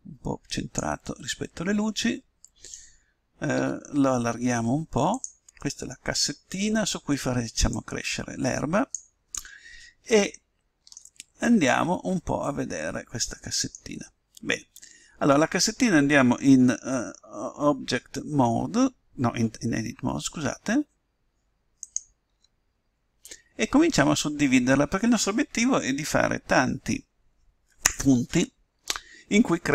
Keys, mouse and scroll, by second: 1.0-2.8 middle drag, 3.5 s, 5.5-7.7 middle drag, 7.7-9.3 drag, 9.5-15.5 middle drag, 20.1 Tab, 21.7-23.5 right drag, 22.3 Tab, 23.5 middle click.